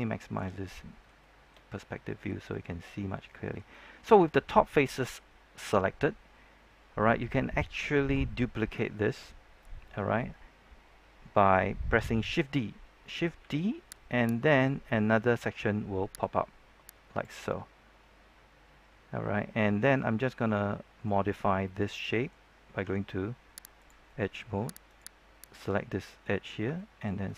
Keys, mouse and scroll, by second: 0.6-7.1 middle drag, 13.3 shift+d, 14.2-15.2 right drag, 16.1-17.3 drag, 18.0-21.3 middle drag, 23.7 click, 24.0 middle click, 24.8 right click, 25.6 middle click, 26.4 scroll up 1, 26.7 shift+middle click.